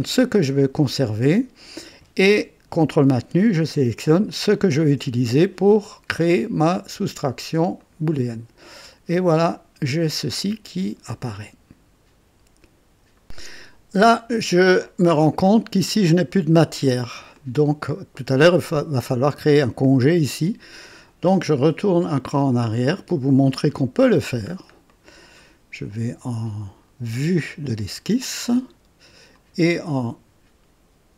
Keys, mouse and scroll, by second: 4.5 ctrl+click, 7.8 click, 8.6-11.0 drag, 11.3-13.2 drag, 13.6-14.9 drag, 15.0 scroll up 2, 16.8-17.2 scroll down 2, 17.3 click, 21.3 click, 22.5 click, 23.5 click, 24.4 scroll up 1, 24.8 right click, 27.4 click, 29.3 click.